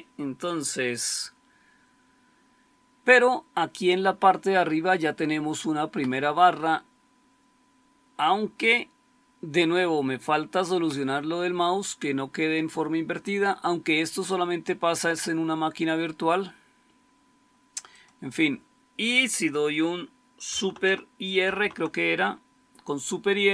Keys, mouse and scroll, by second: 21.3 super+r.